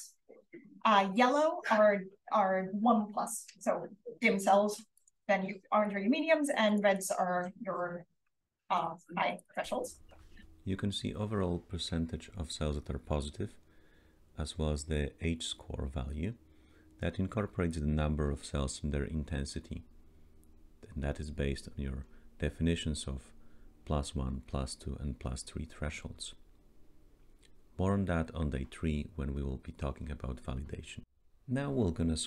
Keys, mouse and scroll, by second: 0.4-2.6 scroll up 1, 2.6-3.8 scroll up 1, 3.8-4.7 scroll up 1, 4.7-6.8 scroll up 1, 5.9-7.1 drag, 6.8-8.7 scroll up 1, 8.7-9.3 scroll up 1, 9.3-9.7 scroll up 1, 9.7-10.7 scroll down 1, 10.7-11.2 scroll down 1, 11.2-11.6 scroll down 1, 30.7-32.2 scroll down 1, 30.7 d.